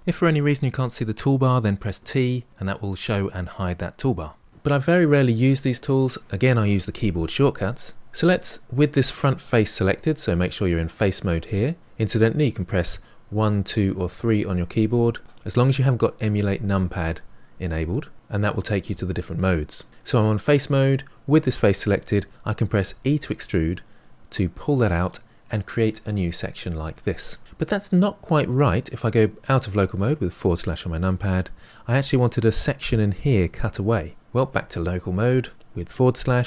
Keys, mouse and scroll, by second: 13.2 1, 13.6 2, 14.0 3, 22.9 e, 30.3 KP_Divide, 34.3 KP_Divide.